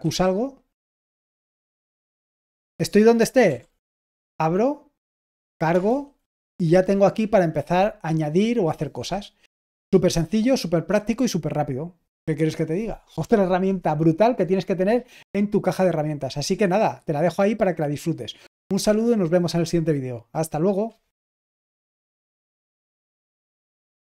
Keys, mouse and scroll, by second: 1.6 y, 3.4 ctrl+p, 3.8 Return, 21.8 typing.